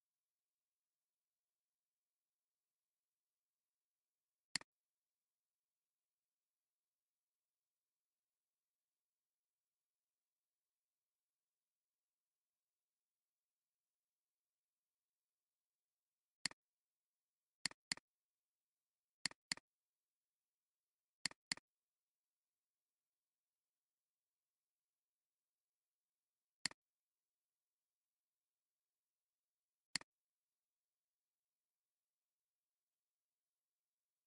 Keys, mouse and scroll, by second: 1.7-2.8 typing, 13.1 click, 15.8 scroll down 1, 17.8 double click, 22.8 double click, 30.7-31.7 typing, 32.8-34.2 typing.